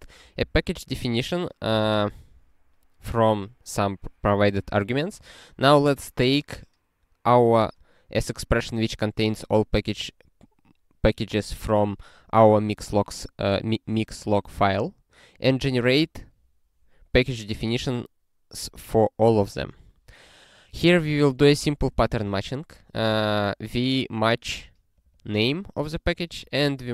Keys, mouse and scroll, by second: 0.4 ctrl+alt+k, 1.7 ctrl+k, 1.9 ctrl+s, 14.3 scroll down 1, 14.9 scroll down 1, 17.4 scroll down 1, 20.6 click, 21.5 ctrl+p, 21.9 ctrl+a, 22.1 ctrl+space, 22.2 ctrl+e, 23.0 ctrl+g, 24.9 click, 25.1 double click, 26.1 click, 26.7 ctrl+alt+@.